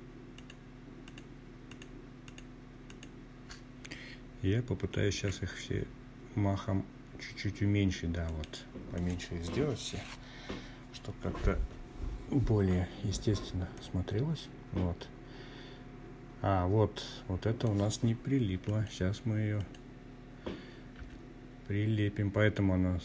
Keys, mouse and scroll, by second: 0.2 shift+click, 0.8 shift+click, 3.1 s, 6.2 click, 6.9 click, 11.7-15.7 drag, 16.6 click, 17.5 click, 18.9 g, 22.2 click.